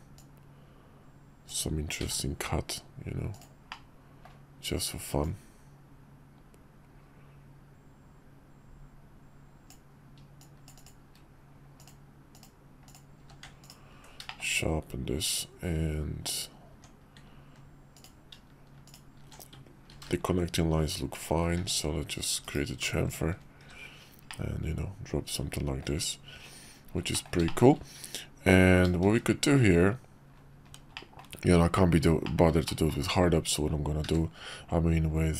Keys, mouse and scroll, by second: 0.2-3.5 drag, 3.8-4.3 middle drag, 10.8 shift+drag, 11.8-12.4 drag, 12.8 click, 13.2 q, 14.3 shift+click, 16.7 Tab, 18.8 alt+shift+click, 19.9 ctrl+b, 21.5 Tab, 22.4 /, 23.6 shift+2, 24.3-25.8 drag, 27.1 middle click, 27.4 shift+middle drag, 29.0 shift+a, 30.9 middle click, 32.2 middle click, 32.6 shift+middle drag, 34.0 q.